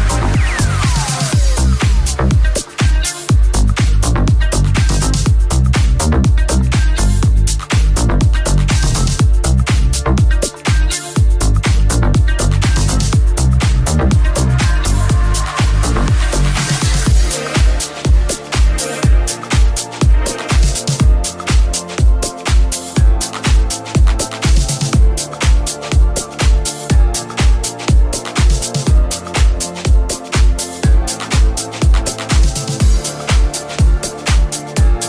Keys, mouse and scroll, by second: 23.7 right click, 23.8-25.6 middle drag, 24.6 g, 25.6-26.8 right drag, 26.7 g, 26.8-35.0 middle drag.